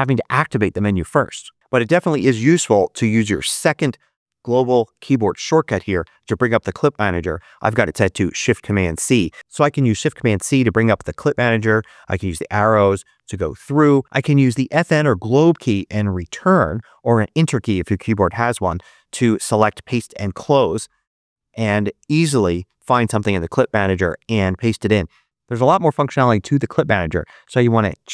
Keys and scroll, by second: 9.9 shift+super+c, 12.0 Up, 12.6 Down, 21.1 Home.